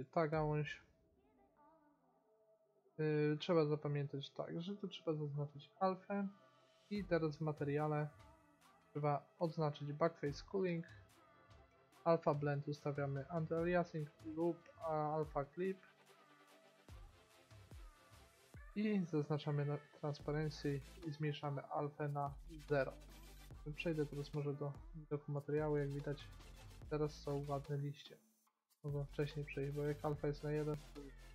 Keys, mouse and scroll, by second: 0.9-2.0 middle drag, 5.0-7.5 drag, 7.5-9.3 middle drag, 10.8-14.2 drag, 16.8 middle click, 17.0-17.6 scroll down 1, 19.5-20.7 drag, 22.0-23.1 drag, 23.1 middle click, 26.2 middle click, 26.4 middle click, 29.7-31.3 drag.